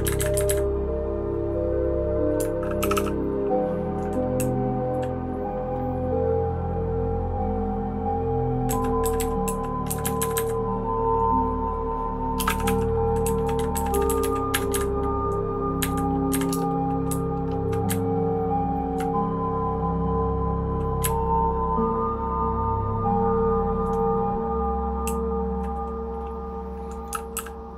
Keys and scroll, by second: 0.0 Up, 0.2 Up, 0.5 Up, 2.8 }, 2.9 }, 4.4 Down, 4.8 Down, 8.7 Down, 9.0 Down, 9.2 Down, 9.4 Down, 9.9 Up, 10.0 Up, 10.2 Up, 10.3 Up, 12.4 space, 12.5 e, 12.6 e, 13.2 Down, 13.7 Down, 13.9 Down, 14.0 Down, 14.2 Down, 14.5 Up, 14.7 Up, 15.8 Up, 16.3 Up, 16.5 Return, 17.0 Down, 17.5 Down, 17.8 Up, 18.4-18.9 Up, 21.0 Up, 21.5-23.7 Up, 25.0 Down, 25.5 Down, 27.3 °.